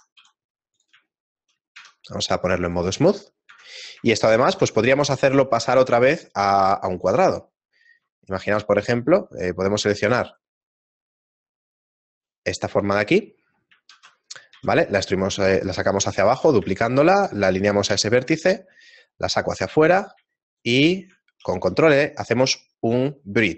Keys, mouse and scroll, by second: 0.4 s, 1.1 shift+middle click, 1.8 Tab, 2.7 click, 3.5 Tab, 4.7 alt+right click, 4.7 shift+middle click, 8.4-9.4 scroll up 3, 9.4 alt+right click, 10.3 alt+shift+right click, 10.8 alt+shift+right click, 11.2 alt+right click, 12.8 shift+middle click, 14.0 middle click, 14.0-14.8 scroll down 2, 14.0 shift+d, 16.8 shift+middle click, 17.9 s, 20.5 alt+shift+right click, 21.4 ctrl+e.